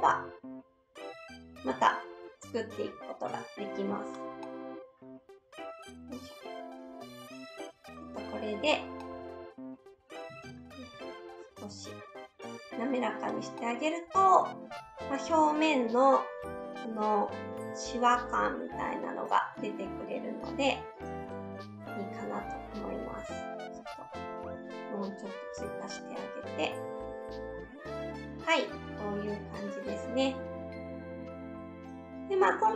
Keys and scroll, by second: 8.6 shift+s, 10.4 ctrl+shift+z, 10.9 s.